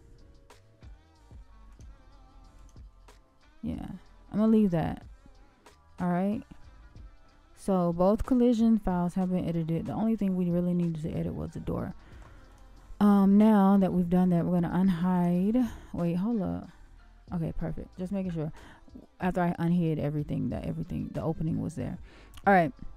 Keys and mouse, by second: 2.6 click, 6.4-8.3 middle drag, 9.0-11.1 middle drag, 15.1 shift+click, 17.5-18.6 middle drag, 21.3-22.2 middle drag.